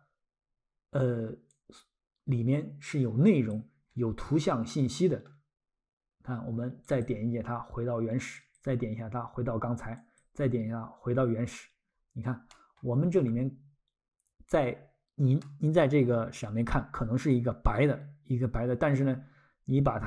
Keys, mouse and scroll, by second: 1.5 click, 3.9-4.2 scroll, 4.7 middle click, 6.9 click, 11.9-12.4 scroll, 12.5 middle click, 12.9-13.3 scroll, 15.4 middle click, 18.3 scroll.